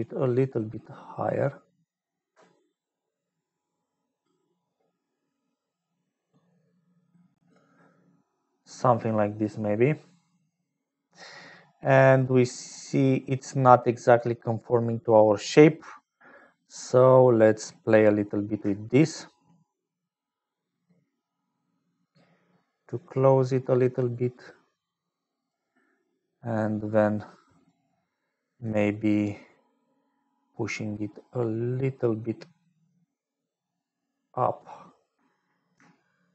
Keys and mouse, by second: 0.0-7.5 shift+drag, 11.5-14.9 drag, 15.9 click, 17.3 click, 19.5-25.6 shift+drag, 27.8 shift+click, 30.2-34.8 shift+drag, 35.9 shift+click.